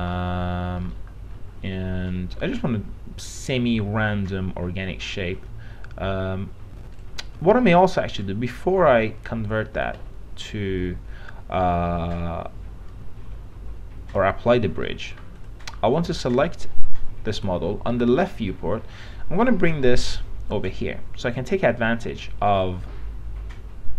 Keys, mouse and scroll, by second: 0.4 alt+middle click, 1.2-4.8 alt+middle drag, 7.2 click, 15.0 alt+middle click, 15.6 click, 18.2 i, 18.5 middle click, 19.7-21.0 drag, 21.6 middle click, 21.8-22.8 scroll down 1, 22.8-23.9 drag.